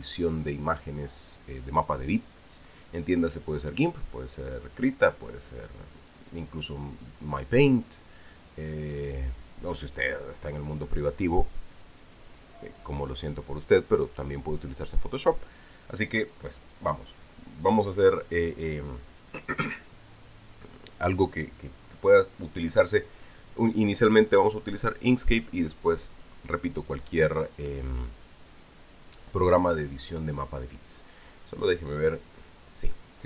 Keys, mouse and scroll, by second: 32.6 click.